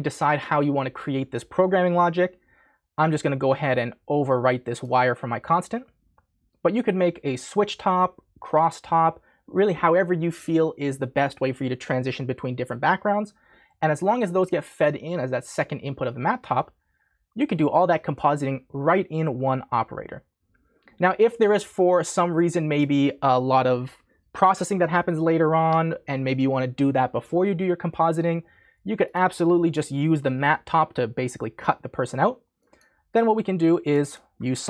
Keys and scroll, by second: 34.3-34.6 typing.